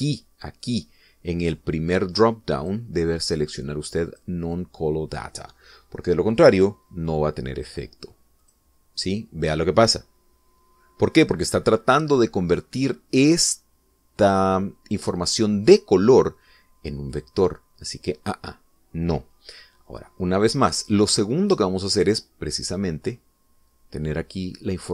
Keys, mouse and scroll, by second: 0.2 click, 1.3 click, 4.2 click, 5.7 click, 9.2 click, 10.0 click, 18.8 click, 19.6 click, 24.4 click.